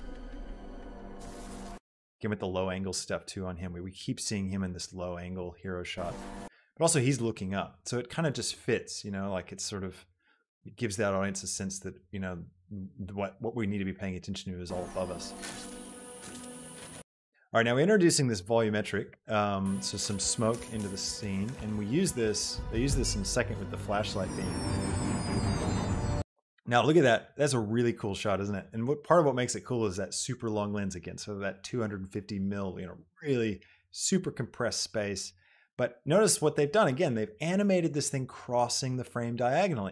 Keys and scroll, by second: 0.0 space, 6.6 space, 14.6 space, 17.2 space, 19.8 space, 26.4 space.